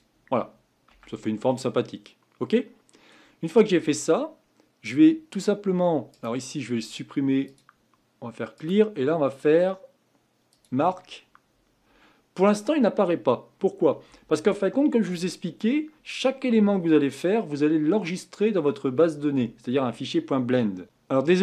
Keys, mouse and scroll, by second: 0.9 Tab, 1.5-4.6 middle drag, 6.1-20.8 right drag, 20.8 n.